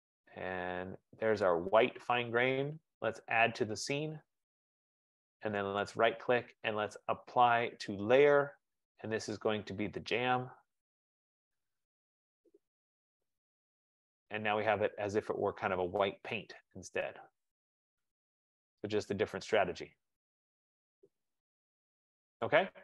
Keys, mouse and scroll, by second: 1.6 click, 2.8 right click, 4.2 click, 6.2 right click, 10.2 click, 13.1 click, 14.1 click, 14.8-15.3 scroll, 16.3-16.9 scroll, 20.6 middle click, 22.5 right click.